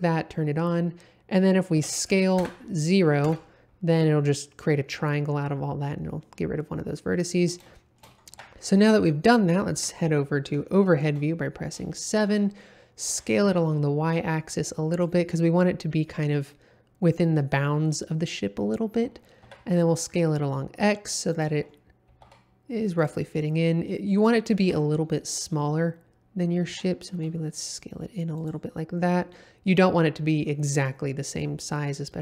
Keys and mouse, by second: 1.7 s, 2.4 KP_0, 3.2 KP_Enter, 7.4 middle click, 7.7 shift+middle click, 8.3 Tab, 8.7-9.2 middle drag, 9.7 KP_7, 10.6-11.0 shift+middle drag, 11.9 shift+middle drag, 13.1 s, 13.5 y, 14.9 click, 19.0 s, 19.4 x, 21.3 click, 22.1 g, 22.2 x, 23.0 click, 23.3-23.8 middle drag, 24.6 KP_7, 26.7 s, 27.1 y, 28.3 click.